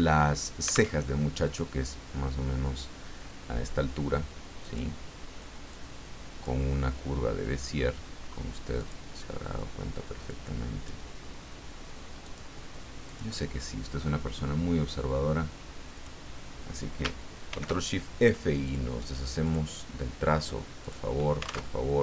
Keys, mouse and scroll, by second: 0.9 alt+Tab, 4.6 click, 5.7 click, 8.8 click, 10.3 click, 12.2 click, 13.1 click, 15.9 click, 17.5 ctrl+shift+f, 18.6 click, 19.4 click, 20.8 click, 21.8 alt+Tab.